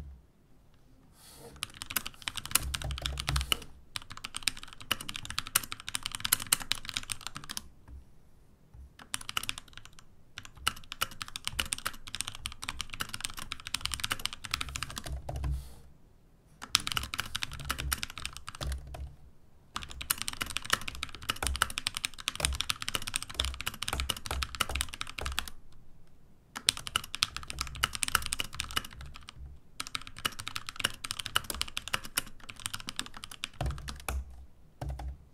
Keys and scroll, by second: 1.5-7.9 typing, 9.9-15.1 typing, 17.3-25.7 typing, 26.7-31.0 typing.